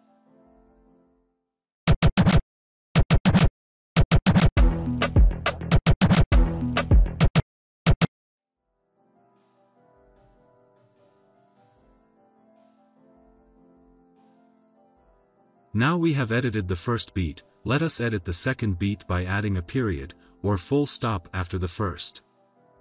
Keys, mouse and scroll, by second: 1.8 click, 16.3 click, 18.6 click, 22.1 click.